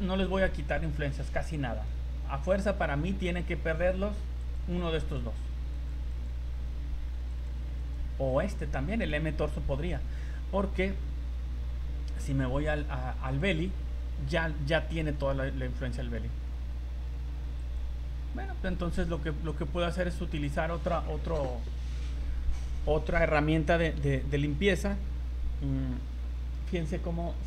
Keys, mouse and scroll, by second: 4.4 click, 5.0 click, 5.7 click, 6.1 click, 7.3 click, 7.8 click, 8.3 click, 13.3 click, 17.6 click, 19.8 click.